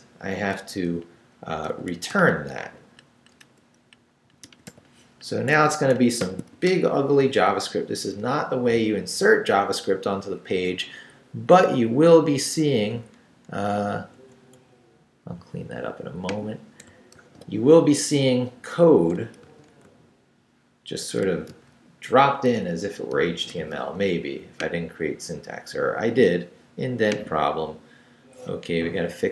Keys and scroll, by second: 0.9-5.2 typing, 5.5 Escape, 6.2 shift+;, 6.5 shift+w, 6.7 Return, 12.9 Right, 17.1 super+r, 19.5 super+r, 21.5 super+r.